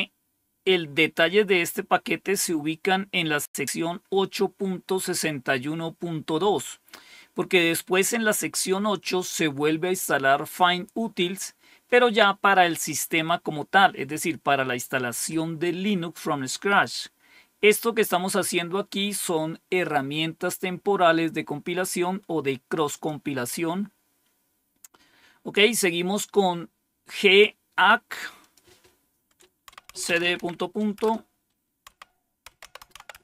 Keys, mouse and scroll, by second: 22.8 click, 28.3 click, 29.3-33.2 typing.